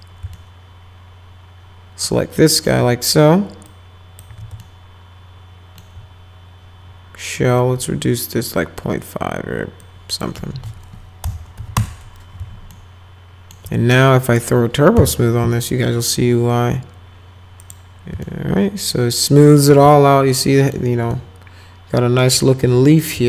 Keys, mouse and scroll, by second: 0.4-2.0 alt+middle drag, 2.4 alt+middle click, 3.6 click, 4.3 z, 4.6-5.8 alt+middle drag, 9.8 click, 11.2 ., 11.6 5, 12.7 alt+middle click, 14.3 click, 14.9 t, 17.6 click, 18.2-19.5 alt+middle drag, 19.9 alt+middle click, 21.1-22.2 alt+middle drag, 22.6 alt+middle click.